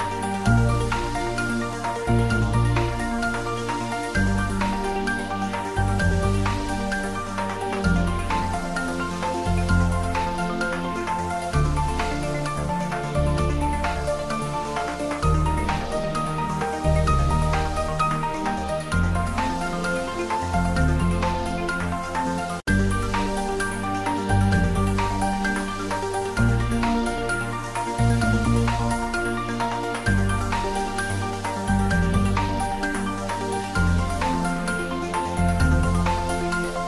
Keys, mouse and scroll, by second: 0.7 click, 2.1 click, 4.7 click, 5.8 click, 7.7-8.1 scroll down 1, 8.1-12.9 drag, 18.7 click, 19.8 click, 23.1-27.3 drag, 27.3-28.2 scroll up 1, 28.6-30.3 scroll down 1, 30.3 middle click, 30.9 scroll up 1, 31.8 click, 34.8-36.8 drag.